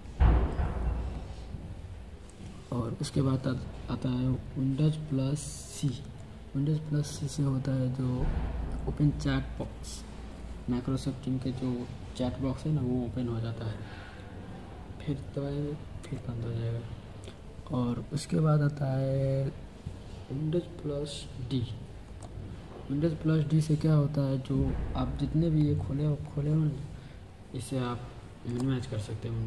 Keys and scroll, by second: 5.7 super+c, 15.9 super+c, 21.9 super+d, 28.4 super+d.